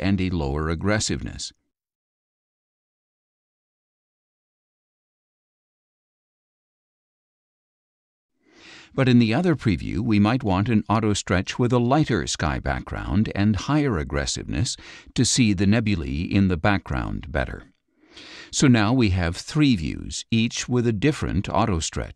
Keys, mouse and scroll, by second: 0.6-1.7 drag, 2.2 click, 4.1 scroll down 2, 5.6 click, 7.6 ctrl+click, 10.0-11.6 drag, 12.6-15.3 drag, 16.9 click, 20.9 click.